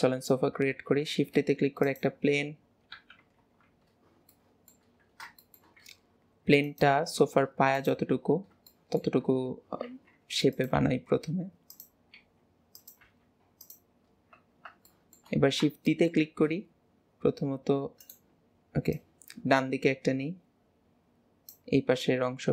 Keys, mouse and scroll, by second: 1.1 shift+a, 3.0 KP_7, 3.5 alt+z, 4.4-5.1 shift+middle drag, 5.1-5.5 scroll up 2, 5.5 shift+middle click, 5.9 s, 8.3 scroll up 1, 8.7 middle click, 9.4 scroll up 2, 9.9 s, 14.1 scroll down 1, 15.1 shift+middle click, 15.5-16.0 scroll down 1, 16.0 shift+middle click, 16.3 shift+d, 19.0 click.